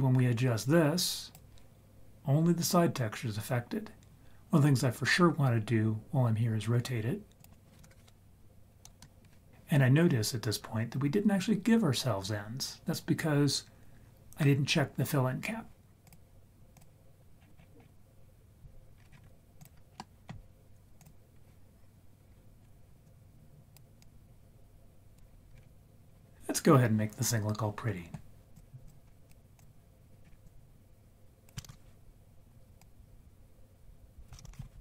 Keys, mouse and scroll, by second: 7.4 click, 16.0 click, 17.2-17.8 scroll down 5, 17.6 scroll up 1, 17.8-19.0 scroll down 1, 19.0-19.3 scroll up 4, 19.6 click, 20.0 middle click, 21.0 click, 23.0 click, 24.0-25.2 drag, 25.5-26.3 scroll up 2, 28.5 click, 29.2 click, 30.2 scroll up 4, 30.5-31.5 drag, 31.7 ctrl+z, 32.8-34.3 drag, 34.5 ctrl+z.